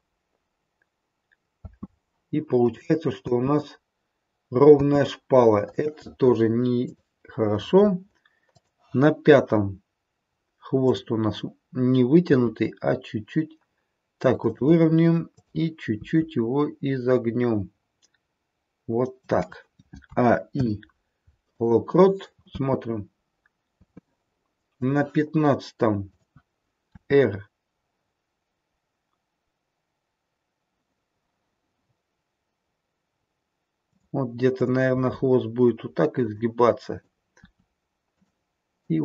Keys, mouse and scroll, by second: 1.6 space, 2.6 click, 3.2 space, 5.6 space, 6.7 click, 8.6 click, 10.8 click, 12.2 r, 15.2 click, 15.9 r, 20.1 a, 20.5 i, 22.4 space, 23.7 space, 24.7 click, 26.0 click, 29.1 r, 34.5 click, 34.8 r, 36.8 click, 37.3 r, 38.8 click.